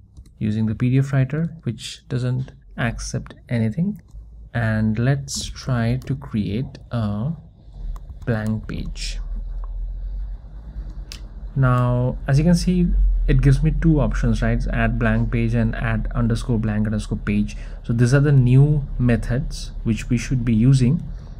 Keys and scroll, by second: 0.2 Return, 2.0 Return, 7.0 Return, 21.1 Return.